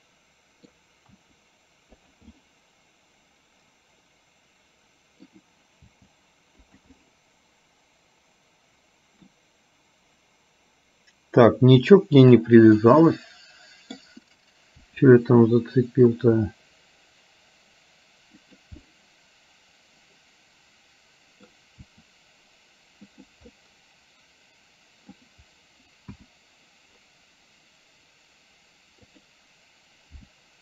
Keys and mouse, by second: 1.3 r, 2.4-5.4 middle drag, 5.9 g, 7.1-9.3 middle drag, 12.4 click, 12.9-14.1 middle drag, 15.1 r, 18.9-21.6 middle drag, 21.9 r, 23.7-25.3 middle drag, 26.2 KP_1, 29.2 click, 30.3 g.